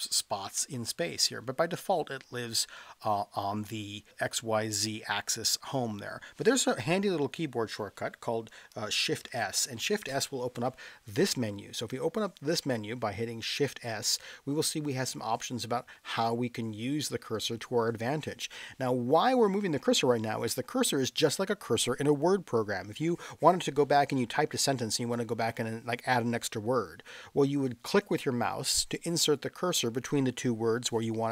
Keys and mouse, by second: 9.3 shift+s.